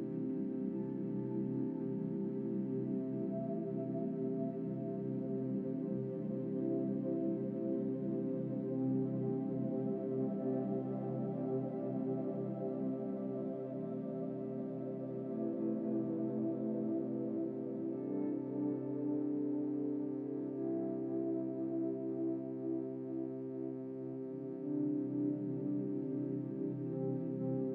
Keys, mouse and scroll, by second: 0.0 u, 1.6 a, 2.5 a, 2.6 a, 6.0 u, 11.7 r, 16.5 ctrl+z, 17.1 ctrl+z, 17.9 click, 24.7 shift+middle click, 25.2-25.6 scroll up 5, 25.7-27.3 drag.